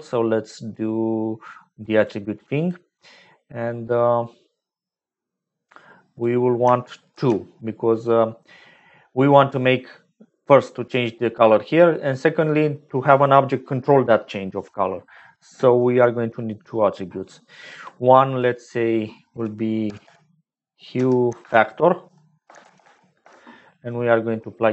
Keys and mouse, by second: 3.7 middle click, 4.2 click, 4.5 middle click, 4.6 click, 6.1 click, 7.1 shift+d, 11.1 middle click, 11.7 middle click, 18.6-24.1 drag.